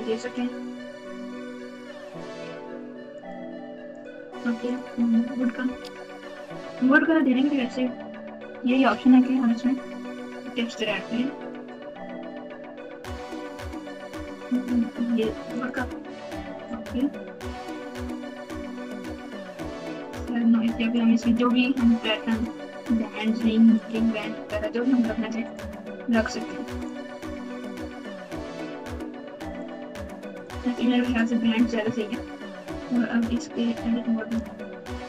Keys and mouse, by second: 3.2 click, 4.6 click, 10.4 click, 11.4 click, 13.8-15.6 drag, 18.0-19.8 drag, 20.9 click, 22.3-23.9 drag, 25.4-26.8 drag, 27.9 click, 29.5 click, 33.3 Tab, 33.6 Tab, 34.5 alt+z.